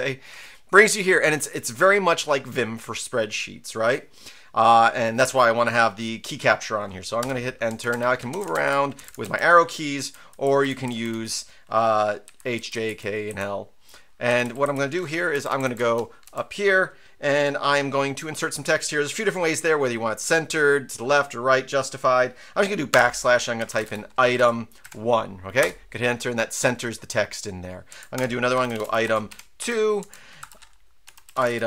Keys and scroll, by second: 7.2 Return, 7.7 Down, 7.9 Up, 8.2 Right, 8.3 Down, 8.4 Left, 8.5 Up, 8.6 Right, 8.9 Down, 9.0 Left, 9.2 Up, 9.9-15.1 typing, 15.3 Left, 15.5 Left, 15.6 Left, 15.8 Up, 22.9-25.3 typing, 25.6 Return, 27.9 Down, 27.9-31.6 typing, 30.0 Down.